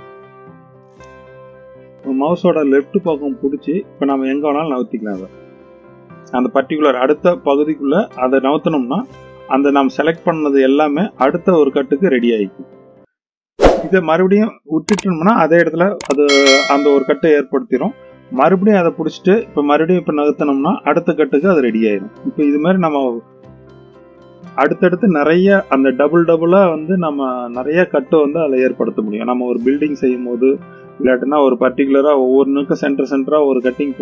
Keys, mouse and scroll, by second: 18.8-21.7 drag.